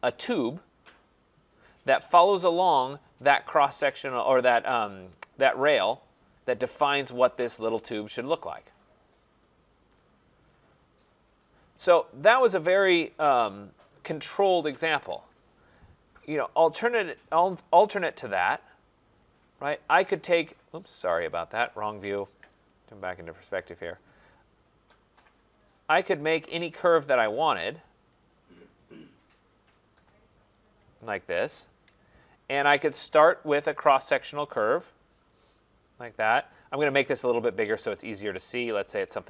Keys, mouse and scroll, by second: 1.8 middle click, 2.1 right click, 10.5 right click, 10.9-14.2 scroll, 14.2 scroll, 18.0-19.2 scroll, 19.2 click, 19.7 scroll, 21.6 click, 21.8 click, 23.2 click, 23.3 click, 23.7-24.8 scroll, 25.6 click, 26.3 click, 27.1 click, 27.6 click, 28.2 click, 28.8 click, 30.6 click, 31.4 Return, 32.3-33.8 scroll, 34.2 click, 35.4 click, 37.1-37.5 scroll.